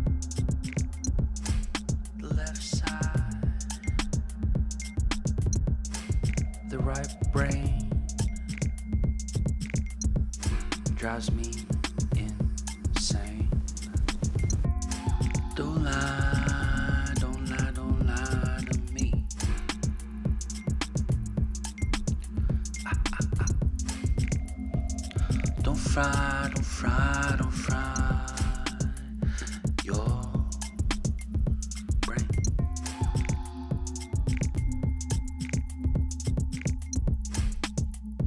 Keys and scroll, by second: 0.0-0.8 typing, 22.5 Return, 33.4 ctrl+t, 34.8 Return, 36.3 ctrl+g.